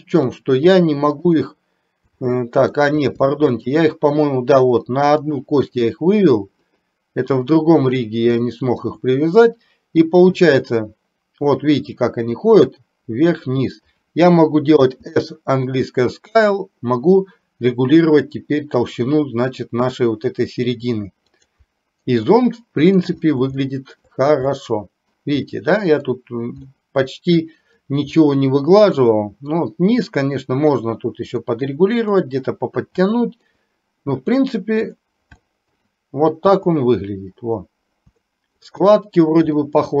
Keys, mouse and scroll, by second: 1.3 shift+click, 2.3 middle click, 3.3 shift+middle click, 6.7 click, 8.4 shift+middle click, 10.4 click, 11.6-14.1 drag, 14.9 s, 22.3-23.6 middle drag, 23.8 shift+middle click, 24.6 middle click, 25.6 middle click, 26.7-27.8 middle drag, 29.1 middle click, 31.4-31.8 scroll up 1, 31.8 middle click, 33.2 shift+middle click, 34.9 click, 35.6 scroll up 1, 38.3 shift+middle click, 39.7-40.0 middle drag.